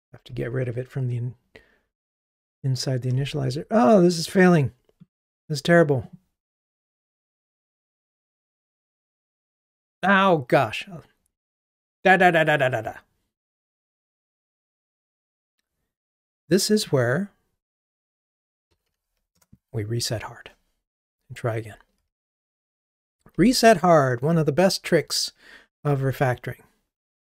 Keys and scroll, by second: 0.4 ctrl+r, 24.3 ctrl+r.